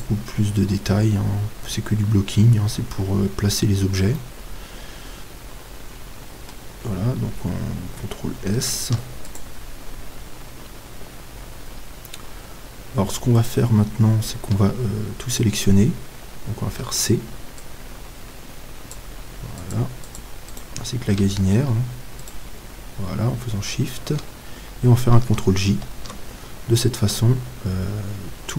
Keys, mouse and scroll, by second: 1.2-3.6 middle drag, 3.6-4.2 scroll down 1, 4.2 scroll down 1, 4.2-6.0 middle drag, 8.8 ctrl+s, 12.1-13.4 middle drag, 13.4-15.3 right drag, 16.7 c, 20.6-24.1 right drag, 25.7 ctrl+j, 27.0 Tab, 27.6-28.5 middle drag.